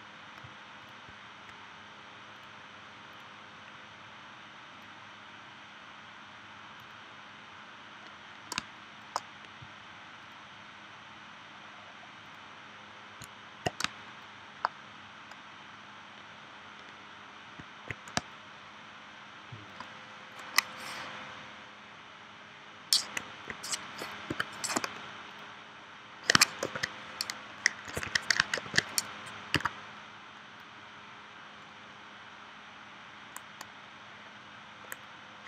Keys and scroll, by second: 8.6 space, 13.9 space, 18.1 space, 24.3 p, 26.6 super+y, 28.6 super+y, 29.5 a.